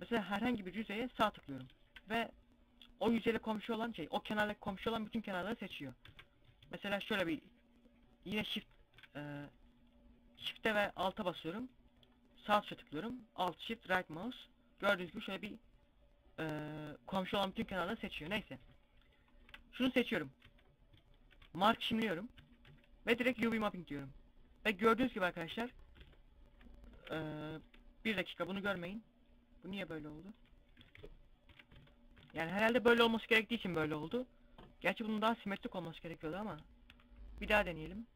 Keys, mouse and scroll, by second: 0.7 alt+shift+right click, 5.3 ctrl+z, 11.5 alt+shift+right click, 14.4 z, 17.1 z, 17.5 a, 18.6 alt+shift+right click, 19.2 middle click, 19.7 z, 20.6 ctrl+e, 21.8 a, 21.9 a, 22.8 u, 24.0 scroll up 1, 24.1 scroll down 1, 24.8 Tab, 24.8 scroll down 2, 25.2-25.7 scroll up 2, 25.5 Tab, 26.5-28.3 typing, 28.8 middle click, 30.3 KP_7, 30.6 KP_5, 31.1 KP_5, 31.2 Tab, 32.0 a, 33.6 scroll down 1, 36.4 u.